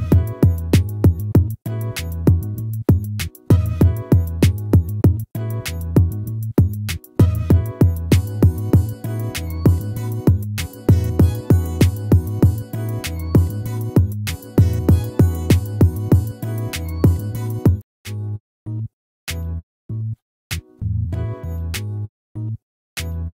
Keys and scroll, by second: 2.6 ctrl+-, 11.3 ctrl+z.